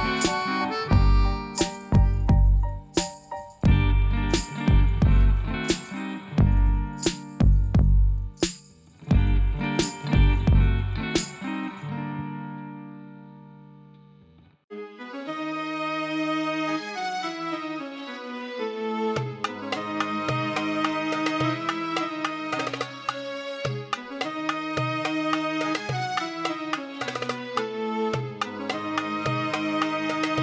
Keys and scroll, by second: 2.7 shift+d, 2.8 x, 6.6 shift+d, 6.7 y, 9.6 g, 9.7 z, 19.9 alt+a.